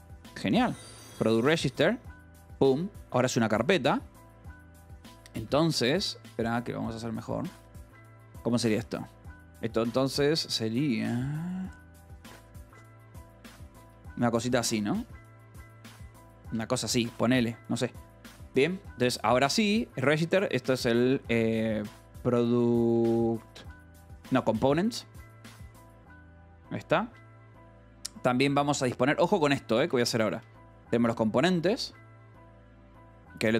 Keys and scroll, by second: 1.0-3.0 typing, 1.9 Escape, 4.6 ctrl+g, 5.4 Escape, 5.6-6.7 typing, 8.7 a, 13.7-17.0 typing, 15.6 Tab, 17.2 Tab, 17.6 Escape, 18.1-28.7 typing, 27.3 Escape, 28.4 Escape, 29.7 a, 29.8 BackSpace, 30.2 Escape, 30.7 o, 32.2 ctrl+g, 32.9 Escape.